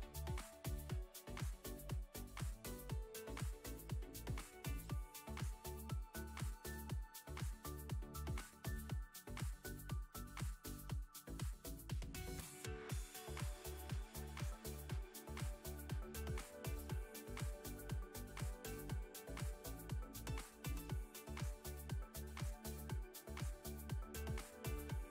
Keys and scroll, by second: 4.9 Tab, 10.2 s, 11.9 z, 13.8 s, 15.3 s, 15.6 z, 16.8 Tab, 18.0 Tab, 20.1 3, 22.4 i.